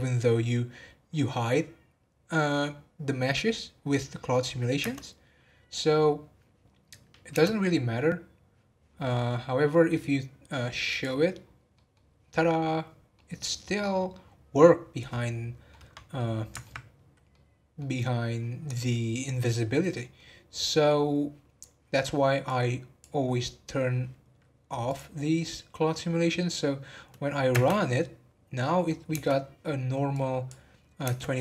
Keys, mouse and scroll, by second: 5.5 space, 7.6 space, 10.8 click, 11.4-11.7 scroll up 2, 11.7 middle drag, 12.0 scroll down 1, 13.1-22.4 middle drag, 22.4-24.9 drag, 25.9 scroll down 1, 26.5 scroll up 2, 27.5 space, 29.1 space, 30.1 click, 31.0 space.